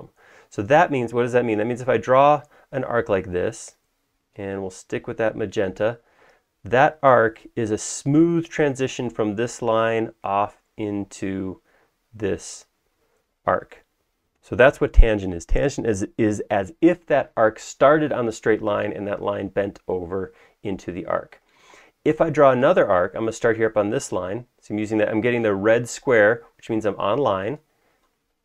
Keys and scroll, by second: 6.5 space.